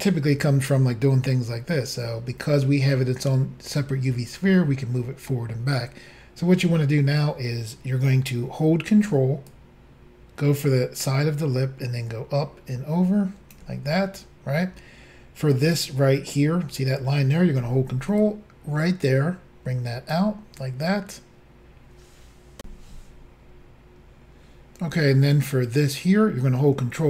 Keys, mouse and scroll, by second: 9.5 ctrl+click, 18.2 ctrl+click, 22.6 Insert.